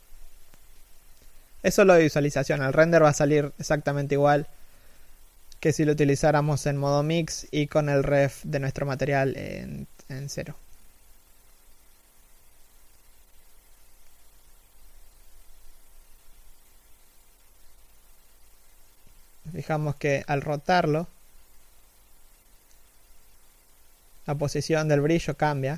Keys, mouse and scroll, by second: 4.5 alt+right click, 5.6 g, 7.9 scroll down 1, 8.1 middle click.